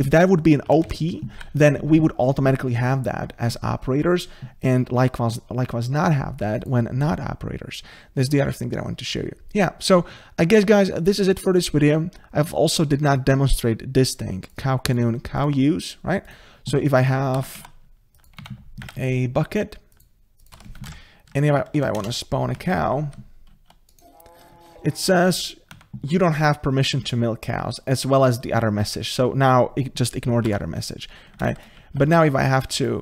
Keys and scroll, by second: 1.4 ctrl+z.